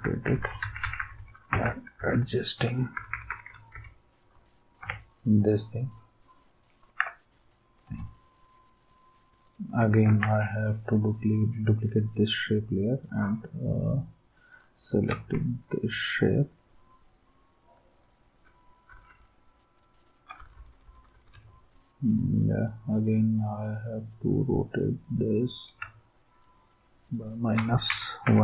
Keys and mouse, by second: 10.0 ctrl+d, 15.3 Left, 15.8-18.4 Left, 18.9 Left, 19.1 Left, 20.3 Left, 20.6 Left, 20.7 Left, 20.9 Left, 21.0 Left, 21.1 Left, 21.2 Left, 27.6-28.4 typing.